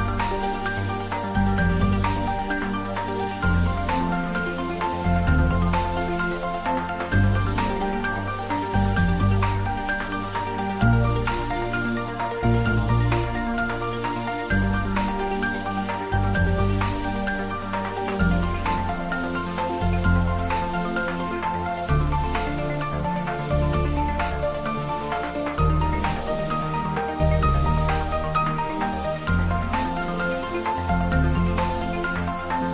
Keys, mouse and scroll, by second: 1.6 a, 2.9-3.6 typing, 3.9 click, 4.9 ctrl+middle click, 5.9 g, 7.0 click, 7.1 Tab, 7.4 shift+middle click, 8.4 shift+z, 9.0 s, 9.7 z, 10.1 click, 10.5 g, 11.7 click, 12.7 s, 13.4 click, 14.4 Tab, 15.1 click, 18.0 s, 19.6 click, 21.4 s, 22.0 click, 22.2 ctrl+z, 22.5 Tab, 22.7 middle click, 23.4 click, 24.1-25.7 typing, 25.2 click, 27.1 z, 27.5 click, 27.7 shift+z, 28.0 ctrl+middle click, 28.3 middle click, 28.9 click, 29.3 ctrl+middle click, 29.6-31.9 middle drag, 31.9 Tab, 32.3 click.